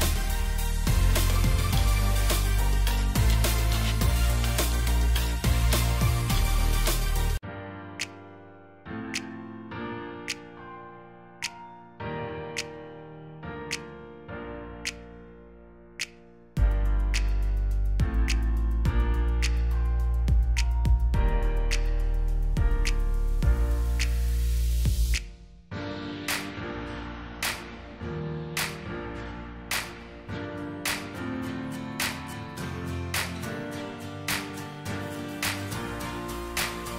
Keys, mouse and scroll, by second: 1.2 double click, 2.5 ctrl+z, 4.6 space, 6.3 right click, 6.9 double click, 10.0 ctrl+g, 10.6 shift+click, 11.7 double click, 12.7 alt+shift+click, 14.8 shift+click, 18.4 scroll up 1, 22.8 alt+shift+click, 24.1 right click, 29.5 Delete, 29.9 Delete, 36.1 alt+scroll up 1.